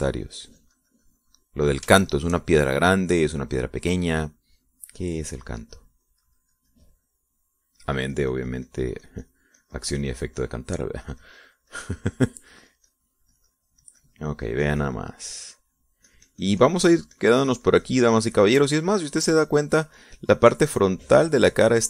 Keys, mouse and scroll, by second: 3.6 shift+middle click, 4.2 shift+middle click, 6.1-9.1 drag, 9.4-12.2 drag, 12.7-14.0 drag, 14.2-17.5 drag, 17.7-21.0 drag, 21.4-21.8 drag.